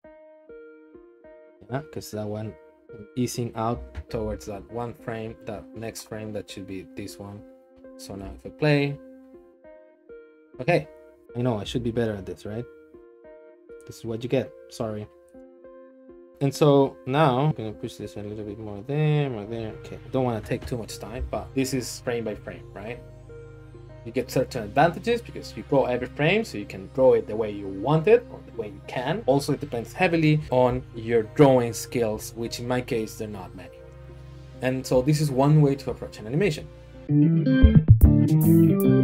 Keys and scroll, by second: 2.8 Right, 3.2 Right, 3.7 Left, 4.0 Left, 4.2 Left, 4.3 Left, 4.6 Right, 4.8 Right, 11.2 Left, 11.2 Right, 11.6 Left, 15.1 Right, 15.5 Right, 15.7 Right, 16.3 Right.